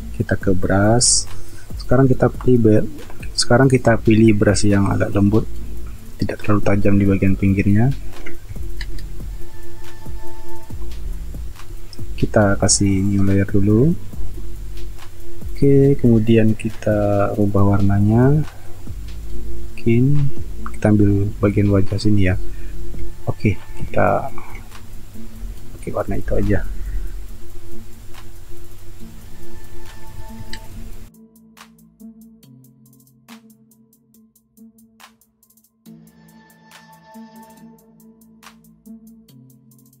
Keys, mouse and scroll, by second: 8.8 ctrl+alt+z, 25.9-27.1 typing, 30.5 ctrl+alt+z, 31.6 ctrl+alt+z, 33.9-34.7 typing, 35.3 ctrl+alt+z, 35.8 space, 36.6 space, 38.1-40.0 typing.